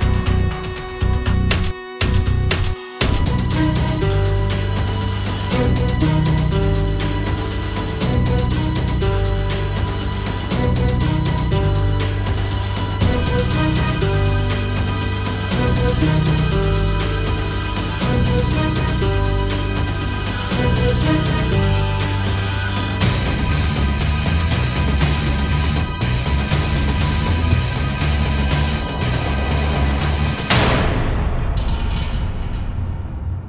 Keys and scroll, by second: 0.6 space, 20.2 w, 31.8 Delete.